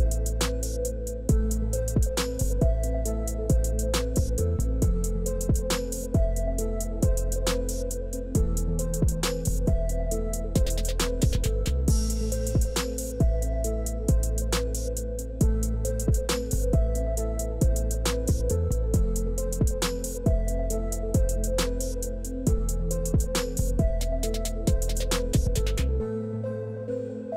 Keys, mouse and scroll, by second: 0.8 click, 1.3 click, 2.8 click, 5.0 click, 9.8 click, 11.4 click, 12.0 click, 12.8 KP_4, 13.0 Return, 16.4 click, 19.0 click, 23.8 click.